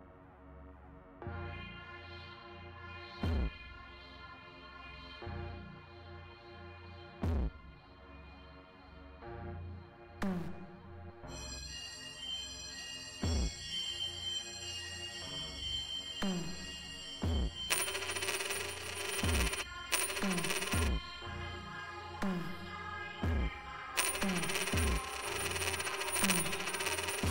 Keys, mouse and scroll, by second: 0.3-3.0 drag, 6.2 click, 8.9 click, 11.9 click, 12.6 click, 15.4-16.8 drag, 17.7 space, 19.6 space, 20.9 space, 22.0-23.3 drag, 23.7 l.